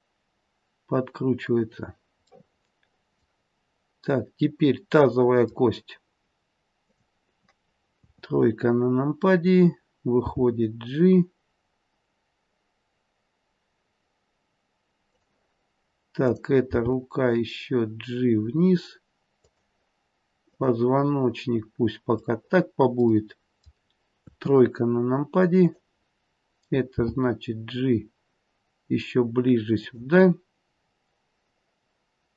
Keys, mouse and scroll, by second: 2.2 middle click, 2.4 middle click, 5.0 middle click, 5.7-6.7 scroll up 2, 6.7 click, 6.7-7.9 scroll up 1, 8.0 KP_3, 8.7-9.6 scroll down 2, 10.1 g, 16.2 click, 17.3 g, 22.4 click, 22.4 middle click, 23.1 middle click, 24.2 KP_3, 25.5 click, 27.0 g.